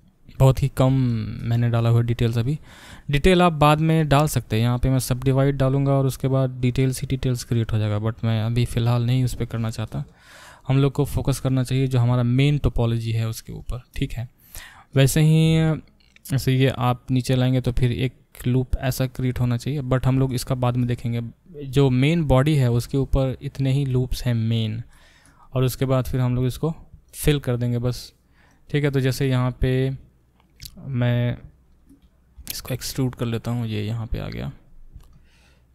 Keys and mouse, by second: 31.0 shift+middle click, 31.7 shift+click, 31.9-34.5 middle drag, 32.4 e, 34.5 click, 34.6-35.7 middle drag.